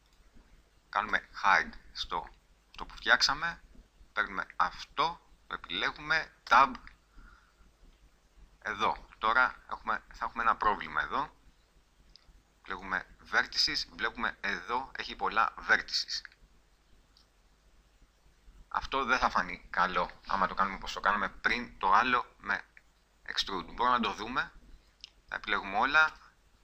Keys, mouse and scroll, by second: 0.4-1.4 drag, 1.4 h, 2.9 middle click, 6.6 Tab, 9.1 middle click, 9.9 middle click, 15.6-16.8 middle drag, 17.0-19.5 middle drag, 19.9 middle click, 21.9 middle click, 22.1 middle click, 23.7 middle click, 24.3 a, 26.3 e.